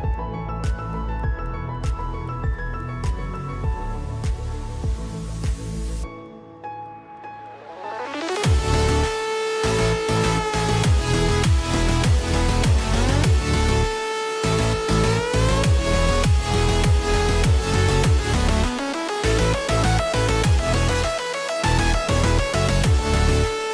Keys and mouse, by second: 1.3 r, 2.3 ctrl+z, 2.7 click, 2.7 right click, 3.1 shift+click, 3.1 shift+right click, 5.8-7.8 drag, 5.8-10.0 right drag, 6.3 ctrl+z, 9.5 shift+click, 10.0 shift+middle click, 10.1-23.7 shift+right drag, 11.3 click, 12.9 click, 13.2 click, 13.9 shift+click, 15.1 shift+click, 15.4 shift+click, 16.1 r, 17.1 ctrl+z, 17.3 r, 19.5 click, 20.6 click, 21.6 r, 22.4 ctrl+z, 22.6 r.